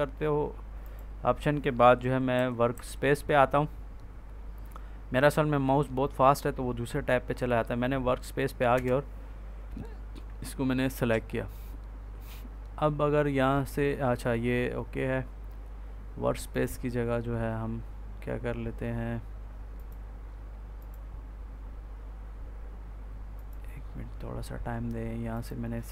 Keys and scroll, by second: 2.2 Up, 8.6 Return.